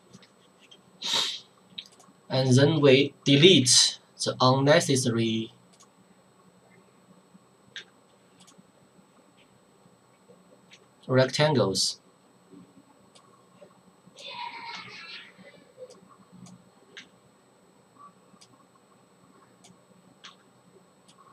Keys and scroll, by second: 3.6 Delete, 7.8 Delete, 10.7 Delete, 14.7 Delete, 20.2 Delete.